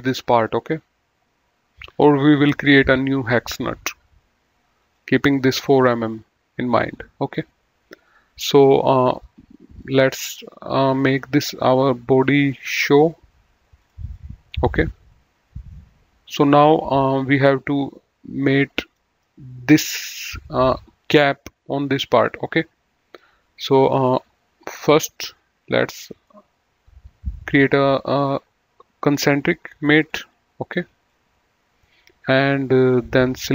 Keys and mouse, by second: 4.8 click, 8.3 click, 9.8 middle click, 10.8 right click, 12.4 click, 13.8 click, 18.9 middle click, 19.8 click, 23.8 click, 26.0 middle click, 28.1 click, 30.1 click.